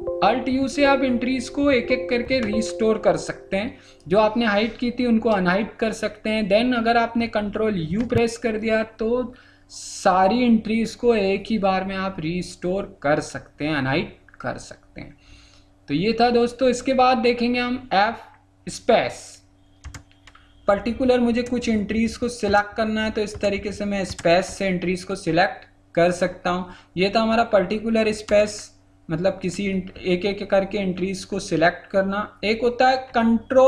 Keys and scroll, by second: 7.9 ctrl+u.